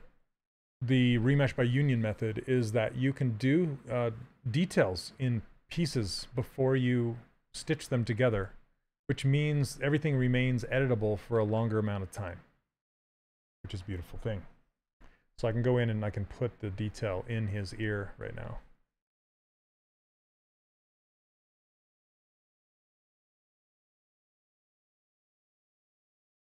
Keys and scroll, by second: 19.3 s, 22.0 shift+f, 22.7 s.